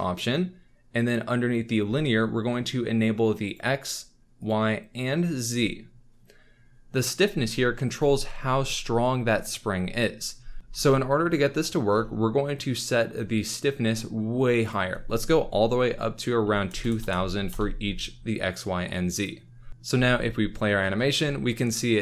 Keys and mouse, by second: 3.4 click, 5.3 click, 10.6 shift+space, 14.6-19.2 drag, 16.9 KP_0, 19.5 z, 19.9 alt+a, 19.9 space.